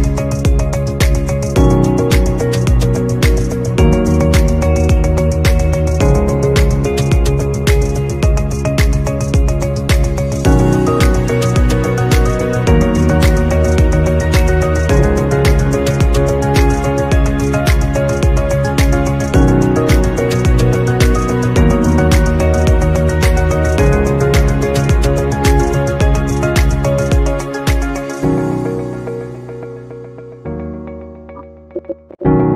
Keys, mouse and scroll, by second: 10.7 double click, 11.4-16.1 typing, 18.0 alt+scroll down 1, 19.4 alt+scroll up 1, 29.8 double click, 30.5-32.5 typing.